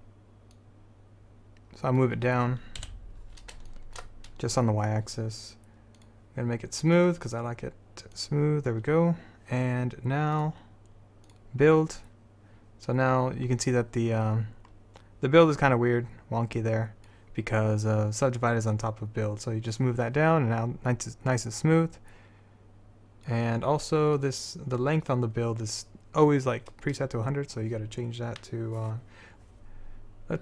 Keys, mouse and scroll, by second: 3.0 KP_7, 7.0-9.7 drag, 10.5-13.3 drag, 14.6-15.7 middle drag, 15.7-17.6 drag, 19.9-23.0 drag, 24.3-30.4 drag.